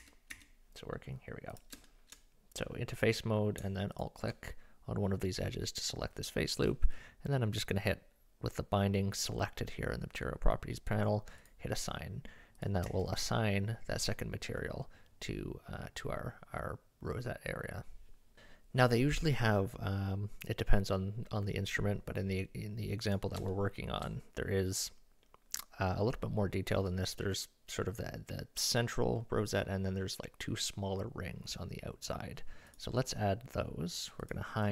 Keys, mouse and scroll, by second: 0.0 Tab, 0.3 Tab, 1.6 click, 1.9 shift+middle click, 3.9 alt+click, 8.5-11.5 drag, 12.6 click, 12.9 Tab, 18.7-20.0 middle drag, 23.1 drag, 23.5 shift+middle click, 32.7-34.7 drag.